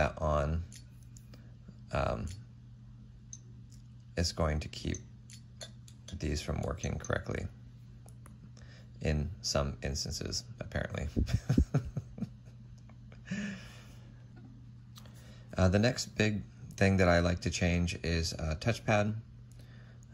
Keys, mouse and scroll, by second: 0.3-1.0 typing, 2.2 typing, 3.3 typing, 4.7-5.7 typing, 5.8 F6, 6.3 F5, 6.6 F6, 7.0 typing, 10.5 typing.